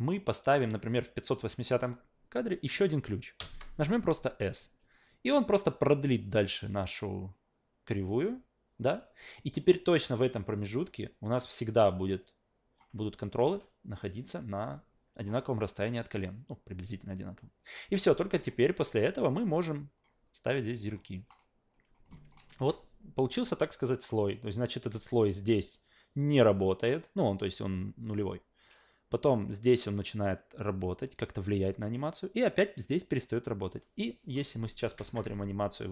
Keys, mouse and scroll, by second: 3.4 s, 9.4-12.8 drag, 14.2-15.2 drag, 16.7-18.3 drag, 19.3-20.0 drag, 20.9 click, 22.3 alt+middle click, 22.6 a, 34.2 click.